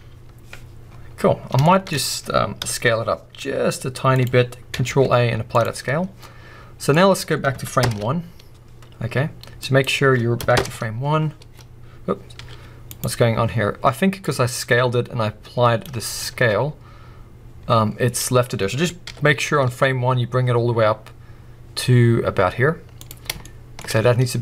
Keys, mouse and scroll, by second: 0.8 scroll down 1, 1.1-1.7 scroll up 2, 1.2-4.2 middle drag, 2.0-2.5 scroll up 2, 2.5 KP_1, 3.4 s, 4.2 click, 4.8 ctrl+a, 5.8-6.5 scroll down 2, 6.9-13.0 drag, 7.8 shift+Left, 9.0 scroll down 1, 10.6 shift+Left, 12.3 g, 13.0 right click, 14.2-23.1 drag, 16.0 scroll up 2, 16.3 ctrl+a, 18.1-18.5 scroll up 2, 18.5-19.0 scroll down 2, 19.0 g, 23.4-24.0 shift+middle drag, 23.8 scroll up 2.